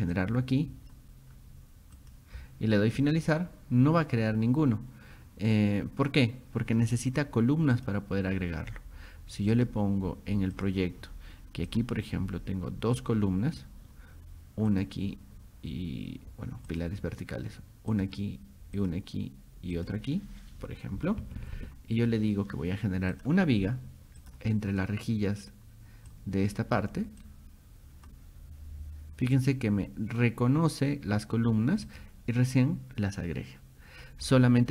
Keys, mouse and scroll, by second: 0.2 click, 2.0 click, 3.0 click, 7.8 click, 9.6 click, 10.6 click, 11.7 click, 13.0 click, 14.7 click, 16.7 click, 17.9 click, 18.8 click, 19.8 click, 23.1 click, 24.2 click, 26.1 click, 27.2 click, 31.9 click, 34.2-34.7 scroll up 3.